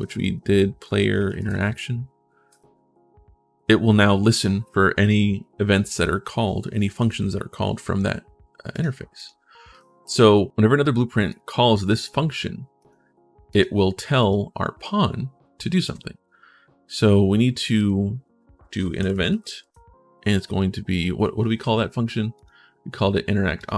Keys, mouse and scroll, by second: 0.0-1.7 typing, 2.3 click, 8.5 click, 8.9 click, 9.5 click, 11.0 click, 12.5 click, 13.3 click, 13.9 click, 13.9 right click, 17.5 right click, 18.8 e, 19.3 space, 22.1 click, 22.1 right click, 23.4 click.